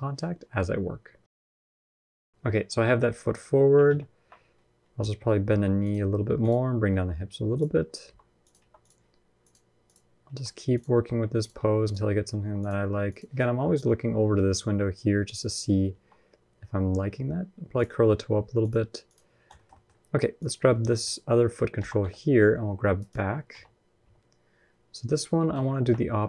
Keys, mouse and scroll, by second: 1.3 scroll up 7, 1.5 middle click, 1.8 click, 2.1 ctrl+Tab, 2.1 click, 2.7 KP_1, 3.1 KP_3, 3.6 ctrl+KP_3, 4.6 g, 6.2 click, 6.7 g, 7.9 r, 8.4 g, 9.2 click, 10.0-12.6 typing, 15.0 click, 15.7 r, 18.4 click, 19.3 shift+middle click, 19.5 middle click, 20.2 click, 20.5 shift+middle click, 20.7 middle click, 21.6 g, 23.3 KP_1, 23.7 KP_3, 25.3 ctrl+KP_1.